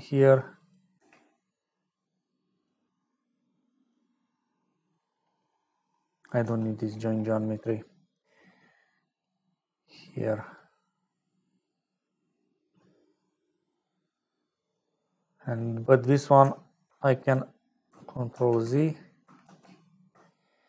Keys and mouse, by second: 0.5 click, 0.9 g, 3.7 click, 6.1 click, 6.4 x, 7.3 middle click, 8.2-9.2 drag, 9.7 middle click, 11.0 middle click, 13.1 middle click, 14.5 middle click, 15.4 middle click, 16.5 ctrl+click, 17.2 click, 18.7 ctrl+z, 19.8 ctrl+z.